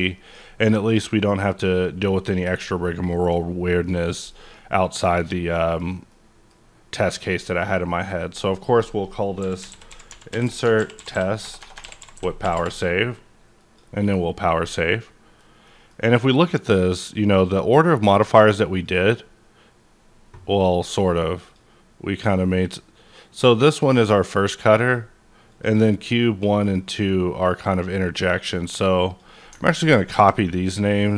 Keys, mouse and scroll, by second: 7.6 click, 8.4 click, 9.4-12.4 typing, 12.5 Return, 13.6 click, 14.8 scroll down 1, 15.0-17.3 middle drag, 17.3 click, 18.7 click, 20.0 scroll down 1, 21.4 click, 22.2 click, 24.8 click, 26.5 click, 27.7 click, 29.1 click, 29.3 double click, 29.8 ctrl+c, 30.1 KP_Enter, 31.1 click.